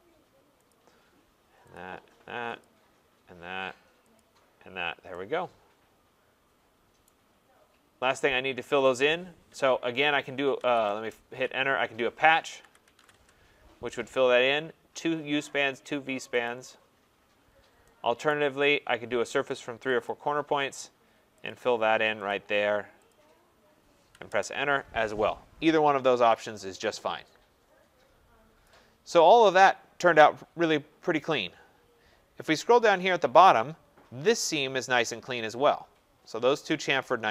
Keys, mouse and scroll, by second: 0.7 click, 1.7 click, 2.6 click, 4.1 click, 4.8 middle click, 7.0 right click, 7.5 middle click, 7.6 middle click, 10.1-13.1 typing, 20.0 click, 21.5 click, 22.3 click, 23.1 click, 24.3 Return, 25.2 middle click, 25.3 middle click, 25.9 middle click, 26.3 middle click, 26.4 click, 26.7 middle click, 26.8 middle click, 26.8 middle click, 26.9 middle click, 28.6 right click, 28.9 middle click, 28.9 middle click, 29.0 middle click, 29.1 middle click, 31.5 scroll, 32.2-33.6 scroll.